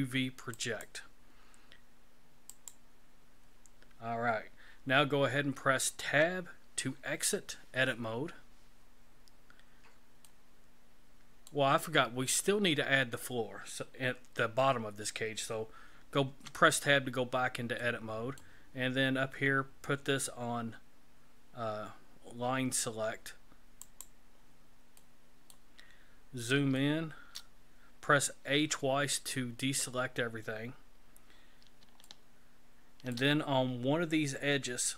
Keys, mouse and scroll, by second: 6.1 Tab, 10.3 middle click, 16.3 Tab, 17.8 middle click, 23.9 click, 25.0 middle click, 26.0-26.5 scroll up 5, 26.8 shift+middle click, 28.4 a, 28.6 a, 31.5 scroll up 3, 32.1 shift+middle click.